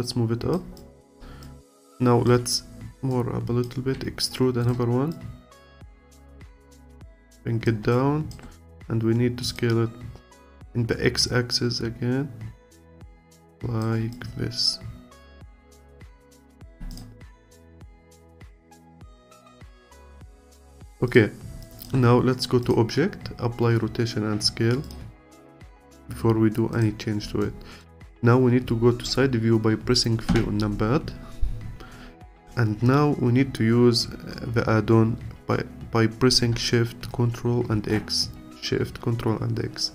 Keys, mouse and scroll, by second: 0.8 alt+click, 3.1 click, 3.9 e, 5.1 click, 7.9-11.7 alt+drag, 14.1-16.7 alt+drag, 16.7 Tab, 16.9 click, 17.2 scroll down 1, 17.5-20.5 alt+drag, 21.1 click, 21.6-25.7 alt+drag, 26.0-26.7 scroll up 1, 26.7 scroll up 1, 26.7 click, 27.4-30.3 alt+middle drag, 30.3 KP_3, 31.3-32.0 scroll up 1, 37.7 ctrl+shift+x.